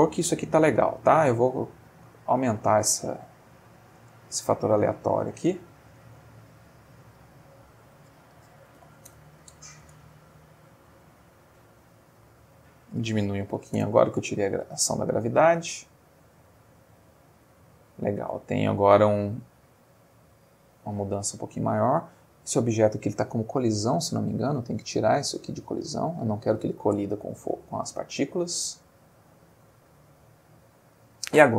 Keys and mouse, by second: 0.9 click, 1.5 Escape, 1.9-3.6 drag, 4.0 space, 6.0 Escape, 7.6 click, 8.7 2, 8.8 0, 9.1 Return, 9.9 space, 11.9 Escape, 12.6 click, 13.4 1, 13.5 0, 13.8 Return, 14.6 space, 17.6 Escape, 18.8 space, 20.9 Escape, 22.0 click, 23.9 click, 24.9 click, 26.1 click, 27.0 space, 30.8 Escape.